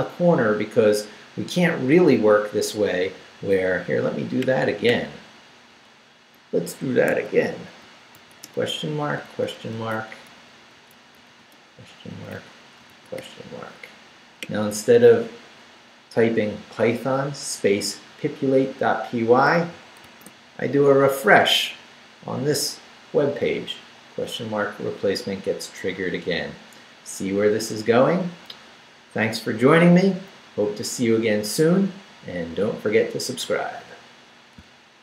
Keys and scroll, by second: 5.9 shift+/, 7.1 shift+Home, 7.4 Escape, 8.1 shift+/, 8.4 shift+Return, 9.2 shift+/, 9.6 shift+Return, 10.3 Up, 10.7 Right, 11.3 shift+/, 11.6 shift+Return, 12.1 Up, 12.8 shift+Up, 12.9 shift+/, 13.1 shift+Return, 14.1 Return, 20.0 super+r.